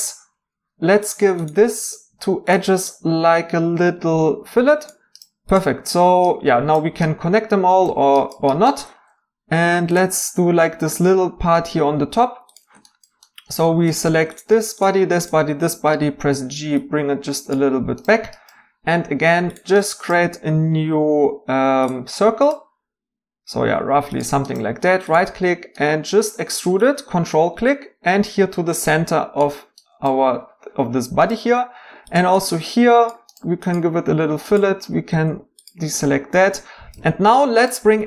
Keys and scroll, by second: 16.0 g, 21.8 g, 34.8 y, 35.1 x.